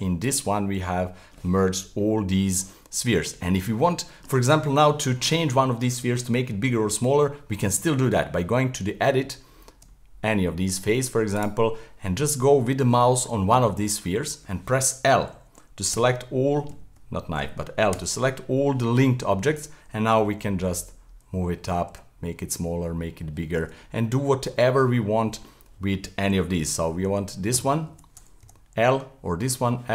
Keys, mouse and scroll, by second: 0.2 click, 3.0-3.5 middle drag, 3.5-4.0 scroll up 5, 4.0-7.9 shift+middle drag, 8.4 Tab, 10.3-11.3 middle drag, 11.3 right click, 12.6-13.0 scroll up 1, 13.0-15.9 shift+middle drag, 15.9 k, 17.9 l, 20.3 g, 24.3-27.0 middle drag, 27.0 k, 28.4 l, 29.5 l.